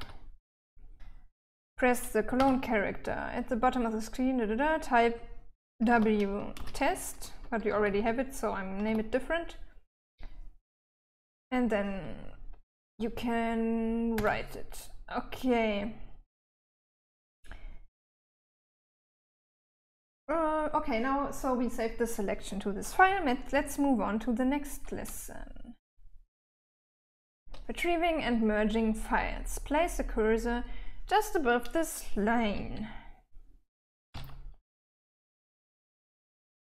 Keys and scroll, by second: 0.0-1.8 typing, 2.8 :, 6.3-9.3 typing, 14.6 Return, 23.9-27.2 typing, 33.0-34.5 typing.